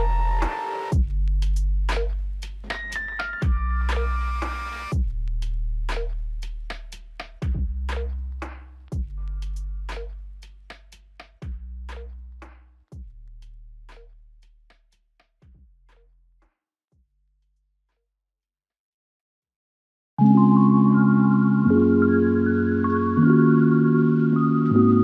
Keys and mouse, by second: 2.9 alt+click, 7.3 double click, 15.4 ctrl+click, 16.8 double click, 19.2 double click.